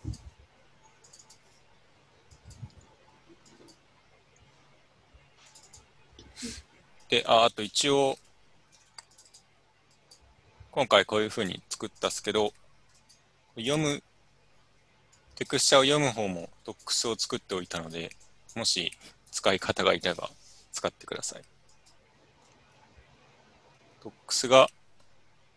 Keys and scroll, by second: 3.3 u, 8.2 u, 9.9 alt+Tab, 11.1 alt+Tab, 14.8 u.